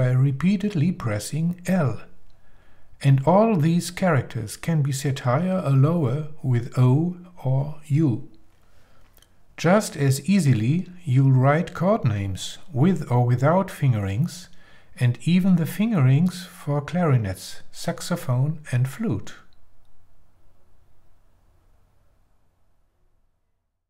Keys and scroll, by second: 2.7 shift+o, 4.4 shift+l.